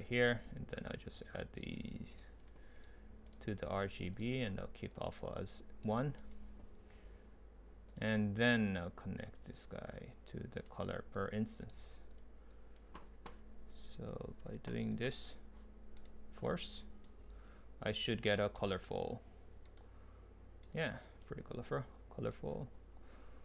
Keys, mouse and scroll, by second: 14.9-16.0 drag, 16.0-17.3 right drag, 17.3-18.2 drag, 19.5 drag, 19.8-20.7 right drag, 20.7 click.